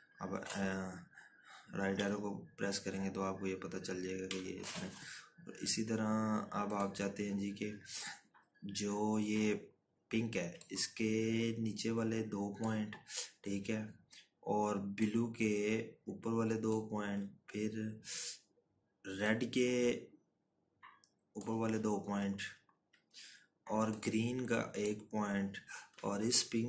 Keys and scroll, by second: 0.2 Left, 4.3 Right, 6.7 Left.